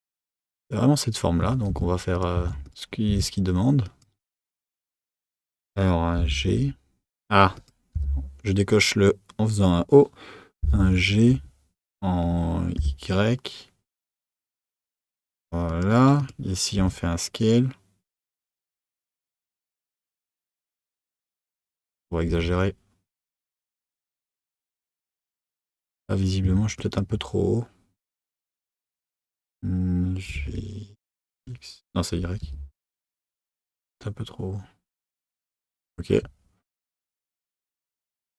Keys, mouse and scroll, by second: 1.9 Tab, 2.3 Tab, 2.7 click, 3.1 Tab, 3.8 click, 4.9 shift+click, 6.2 g, 16.2 click, 16.8 s, 21.7 click, 22.3 s, 25.7 click, 28.0 x.